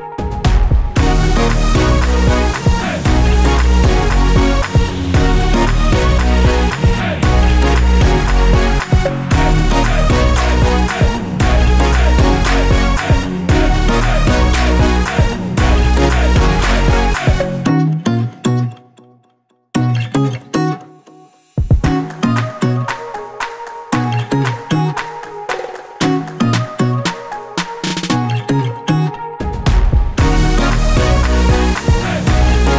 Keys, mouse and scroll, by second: 0.1-0.6 scroll up 1, 1.8 click, 2.7 scroll up 1, 3.0 scroll down 1, 3.4 click, 5.2 click, 5.3 double click, 6.5 click, 7.5 click, 17.6 click, 23.0 click, 23.7 double click, 24.2 scroll up 1, 26.2 click, 26.9-27.5 scroll down 1, 27.6 click, 30.5 ctrl+click, 31.7 click.